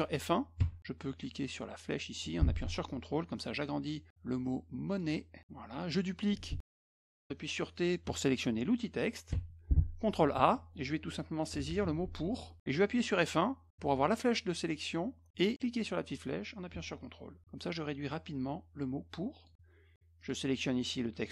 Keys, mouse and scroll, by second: 0.6 F1, 1.9-5.0 drag, 5.4 click, 6.6 click, 9.3 t, 10.4 ctrl+a, 11.3-12.2 typing, 16.4 click, 17.9-19.5 drag, 20.2 click.